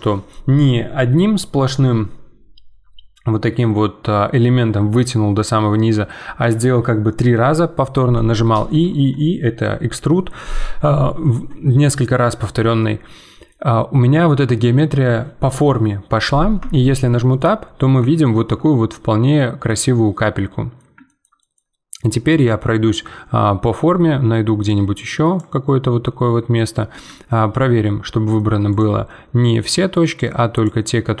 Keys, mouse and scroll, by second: 12.8-16.6 middle drag, 16.6 Tab, 17.3-21.5 middle drag, 21.5 scroll down 2, 22.1-23.8 middle drag, 23.8 Tab, 24.6-26.0 drag, 26.0 middle click, 26.9 z, 27.3-28.7 middle drag, 28.7 click, 29.0-30.1 middle drag, 30.1-31.2 drag.